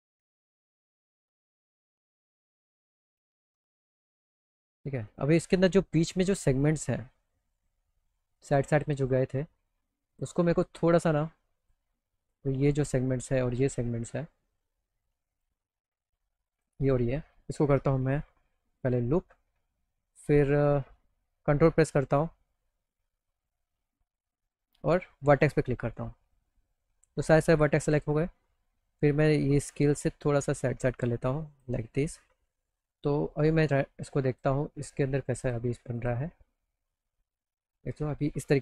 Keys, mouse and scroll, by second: 0.9-2.3 alt+middle drag, 5.1 click, 6.3 alt+middle click, 10.2 click, 11.7 click, 12.2 click, 15.4 click, 16.6 ctrl+click, 18.9 click, 25.3 ctrl+click, 25.3 ctrl+right click, 27.9 click, 28.5 middle click, 29.7-31.6 drag, 31.9 middle click, 32.5 alt+middle click, 32.9 middle click, 33.3 middle click, 34.3 click, 35.5 click, 36.0 click.